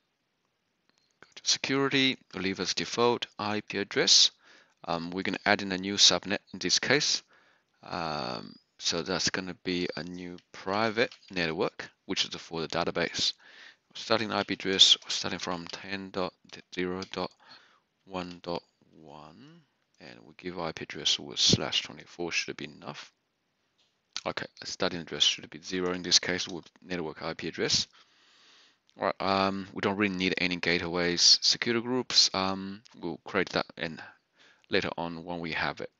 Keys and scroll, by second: 10.4-11.8 typing, 13.7-18.8 typing, 26.3-27.0 typing.